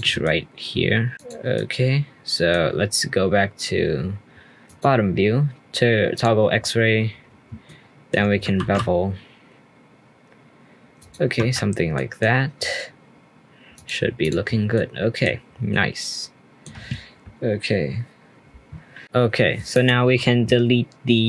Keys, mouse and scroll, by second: 0.2 middle click, 0.9 middle click, 1.1 shift+click, 1.5 middle click, 6.1 click, 6.5-7.4 scroll up 4, 11.9-12.5 middle drag, 12.5-13.7 scroll down 3, 13.7-14.3 drag, 14.5 scroll down 1, 14.7-15.4 middle drag, 15.4 scroll down 1, 15.7-18.7 middle drag, 19.0-19.7 scroll down 2, 19.7 click.